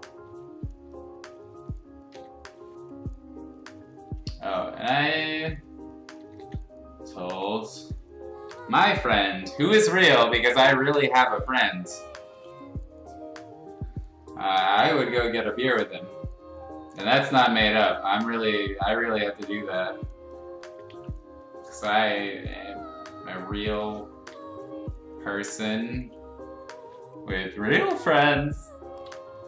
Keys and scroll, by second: 2.1 x, 5.0 ctrl+z, 6.1 ctrl+z, 6.3 ctrl+z, 8.4 0, 17.4 ctrl+z, 18.4 ctrl+z, 20.9 ctrl+z, 24.3 ctrl+z, 26.7 ctrl+z, 28.4 space, 29.2 r.